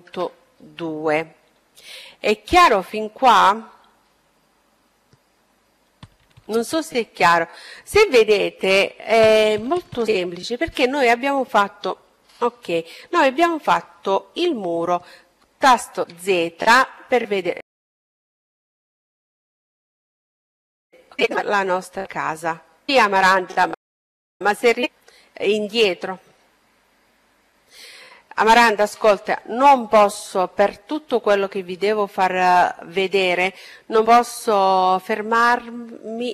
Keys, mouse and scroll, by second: 0.1-4.5 middle drag, 13.7 z, 14.8-19.2 middle drag, 21.4-23.4 middle drag.